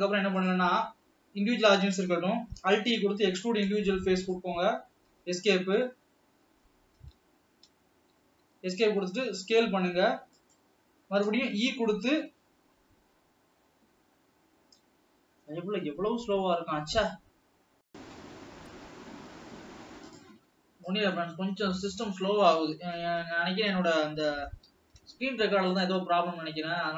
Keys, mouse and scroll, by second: 3.2 alt+e, 8.0 Escape, 8.7 s, 21.0 click, 22.3-23.0 scroll down 4, 23.5 ctrl+s, 24.8 alt+h, 25.9 click, 26.3-26.7 scroll up 3, 26.7-26.9 scroll down 2.